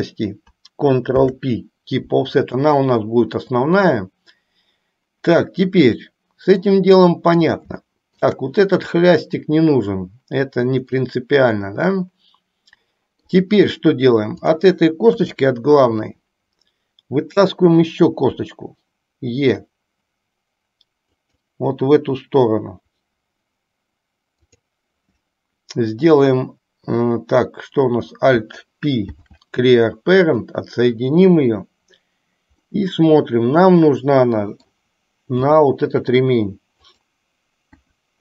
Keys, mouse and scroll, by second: 1.2 ctrl+p, 6.8 middle click, 8.0 shift+middle click, 11.0-13.4 middle drag, 14.4 click, 15.3 KP_1, 18.5 e, 24.5 click, 29.2 alt+p, 32.7-34.8 middle drag, 35.5 g, 37.9 KP_1.